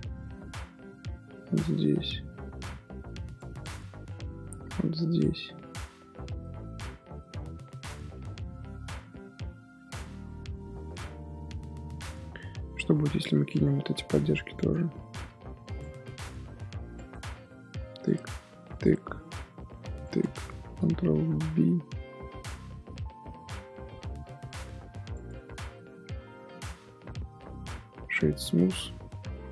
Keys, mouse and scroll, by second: 0.1 scroll up 2, 0.3 middle click, 1.1 ctrl+r, 3.7 middle click, 4.5 ctrl+r, 6.4 middle click, 7.0 scroll down 2, 7.2-8.2 middle drag, 8.2 Tab, 8.2 scroll up 3, 8.8 middle click, 9.1 Tab, 9.9 Tab, 10.3 Tab, 10.6-12.3 middle drag, 12.3 scroll up 1, 12.8 ctrl+r, 14.0 ctrl+r, 15.2 ctrl+r, 16.5 ctrl+r, 17.9 alt+shift+click, 18.7 alt+shift+click, 19.9 alt+shift+click, 20.8 ctrl+b, 25.3 Tab, 25.6 scroll down 1, 25.7 middle drag, 26.0 z, 26.2 scroll down 3, 26.4 middle drag, 26.7 z, 26.9-27.3 middle drag, 27.3-28.4 right drag, 28.4-29.5 middle drag.